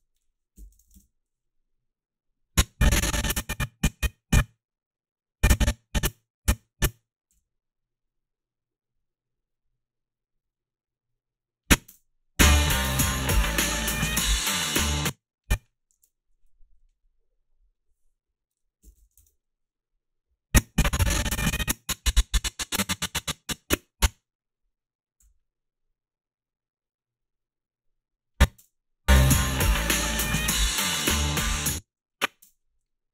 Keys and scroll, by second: 0.4-1.2 typing, 7.4 g, 11.9 space, 14.9 space, 16.0 alt+shift+s, 18.6-19.6 typing, 25.3 g, 28.5 space, 31.5 space, 31.8 a, 32.4 space.